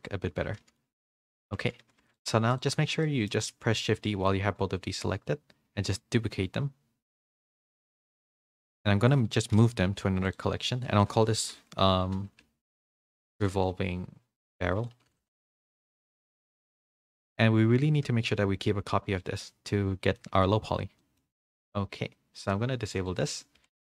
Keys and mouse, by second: 1.3 ctrl+z, 1.8 a, 2.0 a, 3.0 middle drag, 6.9 shift+d, 9.5 m, 13.0 BackSpace, 14.9 r, 20.1-20.4 middle drag, 21.0 middle click, 23.0 click, 23.5 a, 23.7 a.